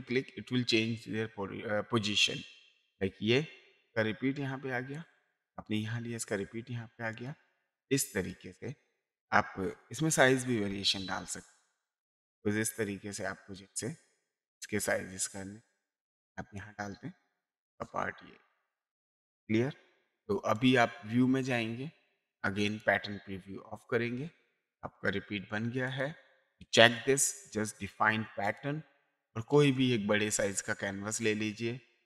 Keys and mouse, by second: 2.7 click, 4.9 click, 7.1 click, 8.3 click, 11.7 click, 16.5 click, 20.5 click, 22.6 click, 25.9 click, 27.2 click, 28.4 click, 29.5 click, 31.2 click.